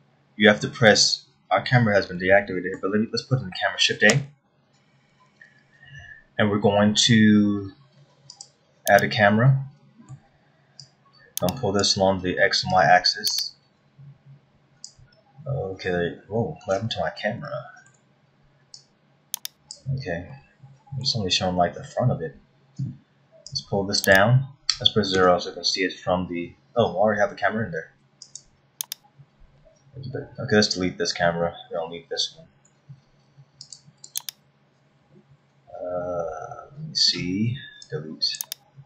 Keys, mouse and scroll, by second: 2.1-2.8 scroll down 3, 2.8 middle click, 4.7 shift+a, 10.1 middle click, 11.4 click, 13.3 click, 15.8-16.5 scroll down 6, 16.9-17.2 scroll up 4, 18.1 shift+middle click, 19.4 click, 20.9 middle click, 21.9 scroll up 3, 24.1 click, 25.8 KP_0, 27.3 scroll down 1, 29.1 click, 33.2 Delete, 34.2 click, 34.7 right click.